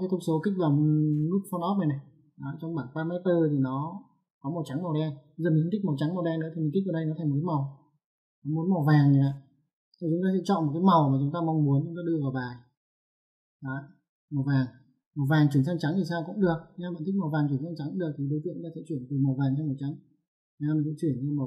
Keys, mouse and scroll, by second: 1.2 click, 7.0 click, 9.1 click, 9.9 ctrl+1, 11.6 click, 20.6 click, 21.1 click.